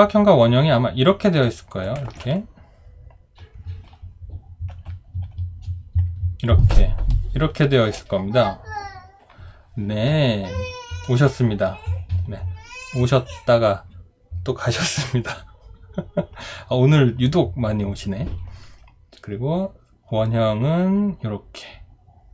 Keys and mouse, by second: 2.1 ctrl+z, 5.2 shift+click, 6.0 shift+click, 6.7 shift+click.